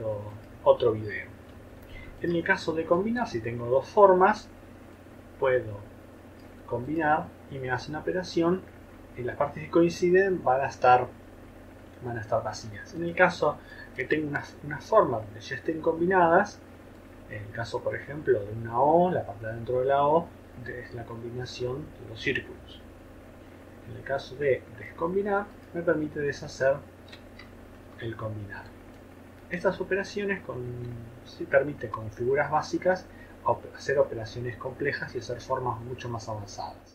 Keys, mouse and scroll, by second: 2.2 shift+click.